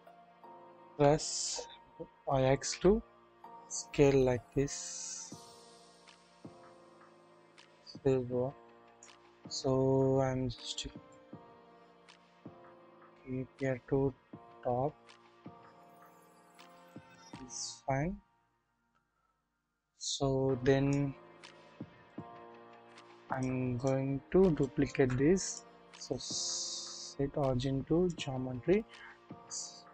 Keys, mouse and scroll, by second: 0.0 ctrl+z, 0.0-0.9 typing, 2.3 typing, 3.9 typing, 7.0-9.1 drag, 10.8 scroll down 1, 11.0 shift+middle click, 11.5 shift+scroll up 1, 12.7-16.9 drag, 20.0 scroll up 1, 20.1 click, 22.0-23.4 drag, 24.0-24.3 scroll up 1, 24.5-24.9 shift+middle drag, 25.8 shift+middle click, 26.0-28.1 drag, 26.0 right click.